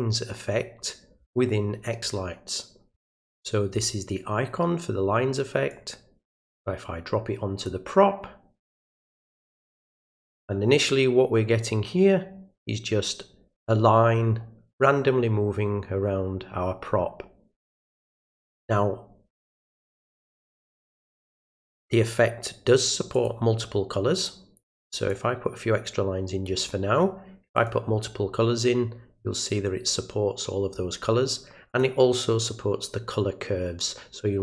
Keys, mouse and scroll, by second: 5.7-7.6 drag, 9.0-10.4 drag, 21.5 click, 23.1 click, 25.1-26.4 drag, 27.5 click, 31.7 click.